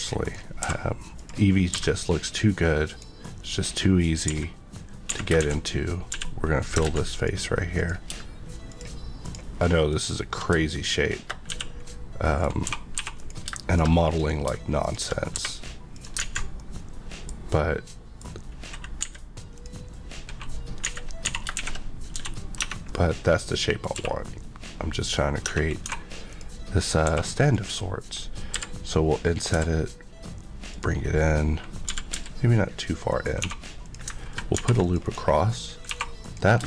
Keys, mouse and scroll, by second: 0.0 scroll down 1, 0.2 click, 0.6 e, 1.1 click, 1.7 e, 2.8 click, 3.2 middle click, 4.3-6.1 typing, 6.8 ctrl+z, 7.1 click, 9.2 Left, 10.7 shift+click, 11.5 f, 11.9 middle click, 12.6-13.0 typing, 13.2 click, 13.9 click, 14.5 shift+click, 15.0 click, 15.3 e, 15.9 click, 16.3 alt+z, 16.5 middle click, 19.0 a, 19.5 click, 20.8-21.7 typing, 22.6 Tab, 22.9 middle click, 23.9 q, 25.4 Tab, 25.8 2, 26.3 click, 27.0 3, 27.4 click, 28.5 i, 29.3 click, 29.5 e, 30.7 click, 33.1 click, 33.4 2, 33.8 click, 34.6 ctrl+r, 34.8 click, 35.0 right click, 35.8 2, 36.2 click.